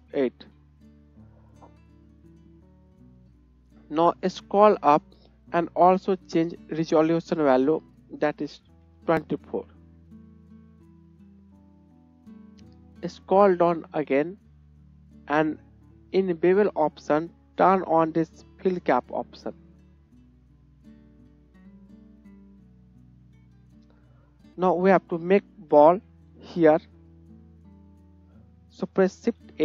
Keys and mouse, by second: 19.0-22.2 drag, 21.0 KP_1, 22.2 middle click, 22.5-23.2 shift+drag, 23.2-25.9 middle drag, 25.9 KP_1, 25.9-29.3 drag, 28.2 KP_1, 29.1 shift+a.